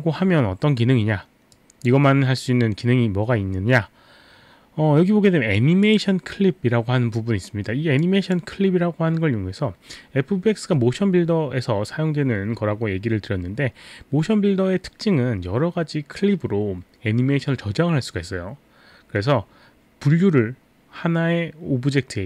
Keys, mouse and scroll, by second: 1.5 click, 5.8 click, 8.0 click.